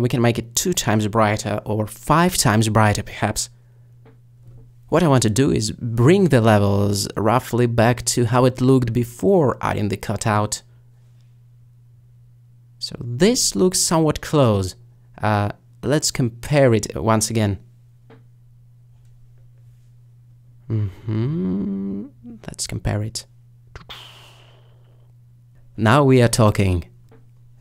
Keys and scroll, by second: 1.9 2, 7.9 5.